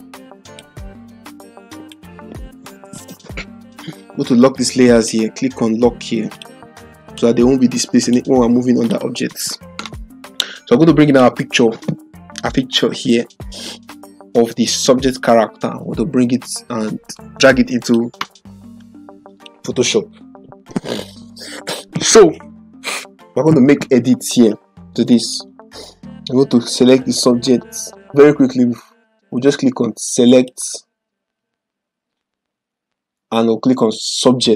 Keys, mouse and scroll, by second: 0.4 ctrl+click, 4.9 click, 11.1-18.0 drag, 13.6 typing, 25.4 click, 30.2 click, 34.1 click.